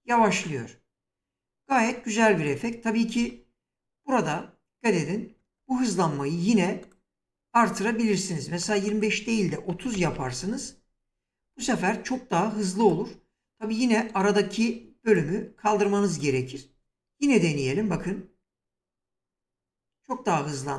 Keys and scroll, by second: 3.1 space, 5.4 space, 9.6 typing, 10.0 Return, 17.5 space.